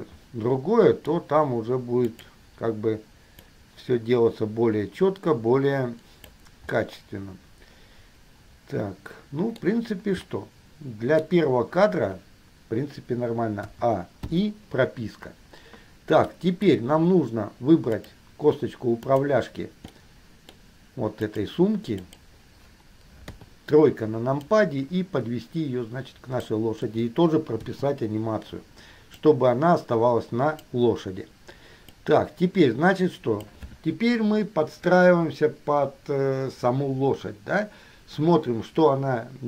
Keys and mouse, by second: 2.2 click, 3.7-6.5 drag, 7.0-10.5 middle drag, 10.6-11.8 middle drag, 13.8 a, 14.5 i, 16.5-17.2 middle drag, 18.1 middle click, 19.2 middle click, 20.1-21.6 middle drag, 22.2 click, 23.5 KP_3, 24.6-26.7 drag, 27.8 i, 29.3-31.0 drag, 32.1-33.7 drag.